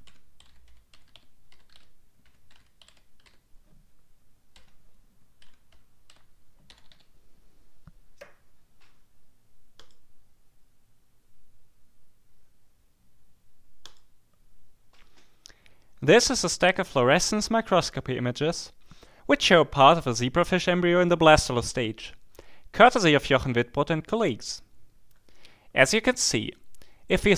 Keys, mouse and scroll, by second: 0.0-7.3 typing, 9.8 click, 13.8 click, 26.2 click.